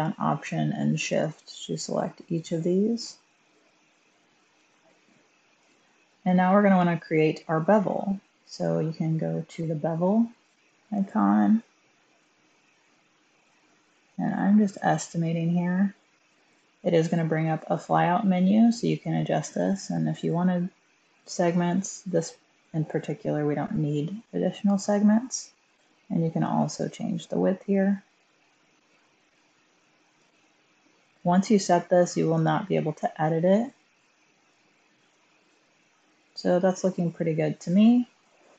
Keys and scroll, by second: 4.4 1, 36.7 1.